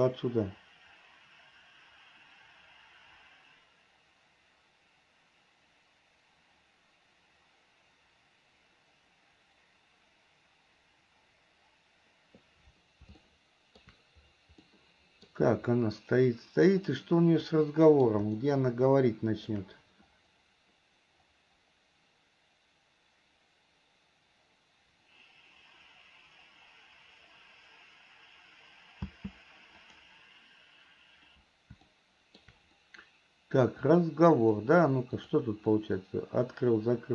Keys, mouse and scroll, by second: 0.2 click, 13.5 shift+middle click, 15.0 middle click, 17.7 middle click, 18.7-19.9 shift+middle drag, 30.0 click, 32.0 shift+middle click, 34.0 click, 35.5 click, 36.0-37.1 drag.